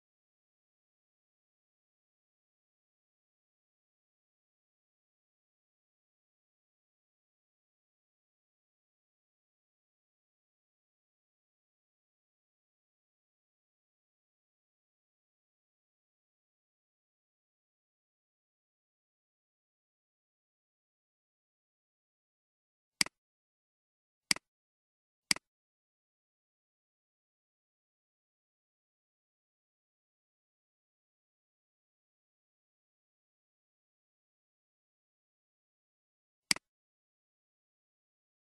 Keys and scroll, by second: 27.2-31.5 typing, 33.5 alt+2, 33.8 alt+6, 37.3-37.7 typing.